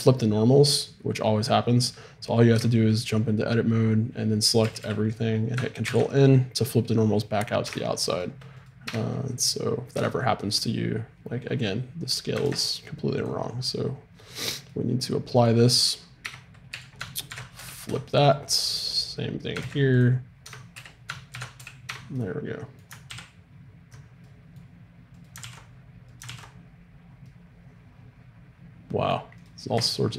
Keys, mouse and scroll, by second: 2.6 Tab, 4.6 a, 4.8 a, 5.8 ctrl+n, 7.6 Tab, 8.8 Tab, 9.9 Tab, 12.4 ctrl+a, 16.2 Tab, 16.7 a, 17.3 ctrl+n, 17.6 a, 17.9 Tab, 18.2-20.0 right drag, 19.6 ctrl+a, 20.4 Tab, 20.8 a, 21.4 ctrl+n, 21.6 a, 21.9 Tab, 23.1 alt+r, 25.2-27.2 drag, 25.4 alt+r, 26.2 alt+r, 27.3 click, 29.4-30.1 right drag.